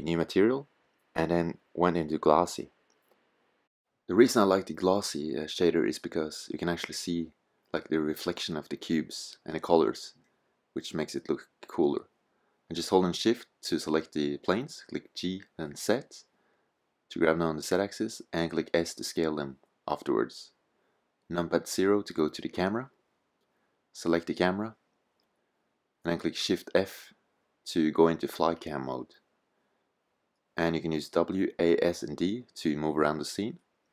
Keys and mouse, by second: 3.9 click, 9.8 middle click, 11.4-13.5 drag, 13.5 g, 15.9 s, 16.5 click, 19.4 KP_0, 26.4 shift+f, 33.6-33.9 middle drag.